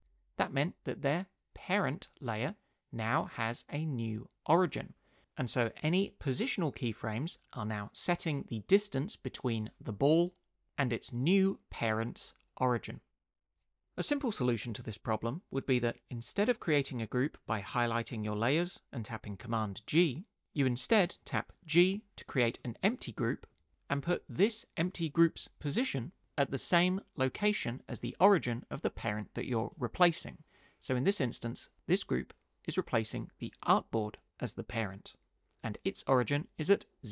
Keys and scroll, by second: 21.7 g.